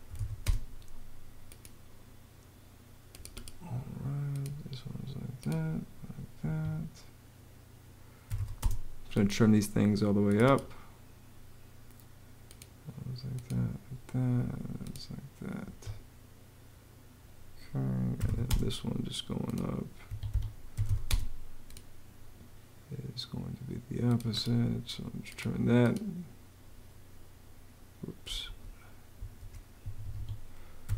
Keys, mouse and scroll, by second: 0.0-0.5 typing, 6.2 Escape, 7.8-8.6 typing, 15.4 Escape, 17.7-18.6 typing, 19.9 Escape, 20.3-21.1 typing, 28.2 super+z, 29.3 super+z, 29.6 super+Escape, 30.4-30.9 typing.